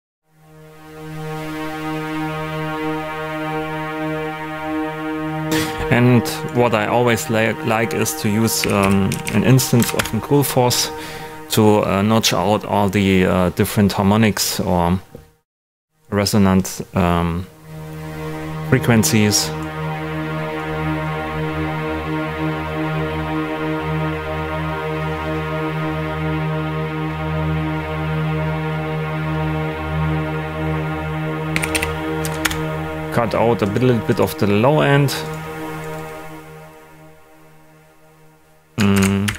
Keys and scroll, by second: 8.3-9.6 typing, 9.8 Down, 9.9 Return, 31.3-32.2 typing, 32.4 Return, 38.9 shift+d, 39.2 shift+#.